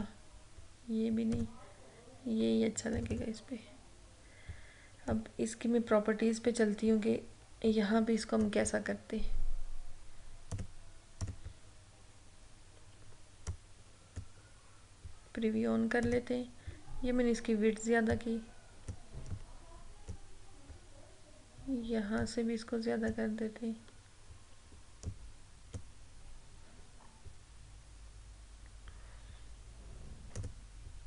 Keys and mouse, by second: 13.6-22.3 drag, 22.3-25.2 drag, 25.2-30.5 drag.